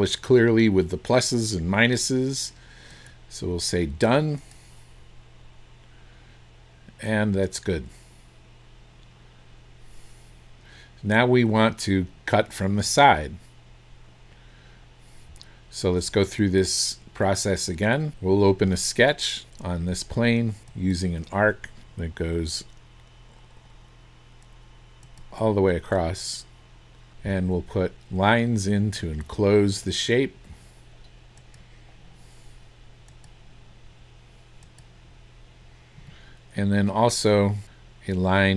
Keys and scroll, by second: 27.1 Escape, 36.0 Escape.